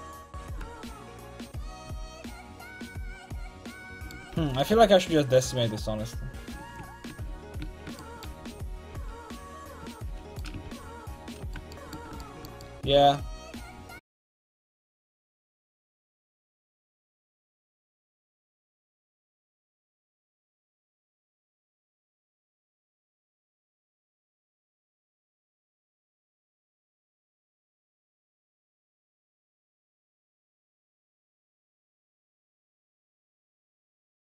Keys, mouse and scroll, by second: 0.5-2.3 drag, 1.6 a, 2.3-4.0 middle drag, 4.3 ctrl+z, 4.5 ctrl+z, 4.7-6.5 ctrl+z, 7.1 Tab, 8.9 ctrl+z, 9.6 Tab, 10.6 alt+z, 14.9-17.5 typing, 24.3 alt+super+z, 25.4 space, 28.5-30.5 drag, 32.4-34.2 middle drag.